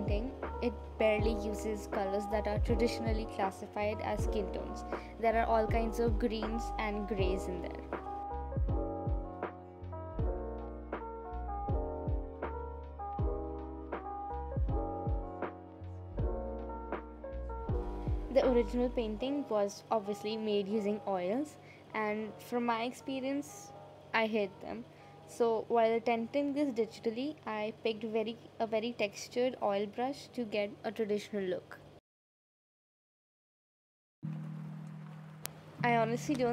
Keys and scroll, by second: 14.5 space, 19.6 ctrl+z, 21.9 space, 29.2 space, 33.3 space.